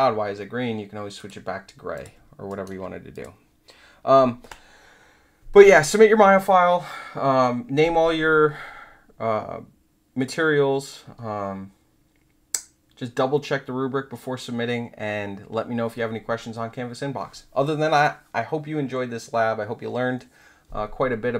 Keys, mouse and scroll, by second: 1.1 click, 1.9 click, 2.4 alt+right drag, 3.1 click.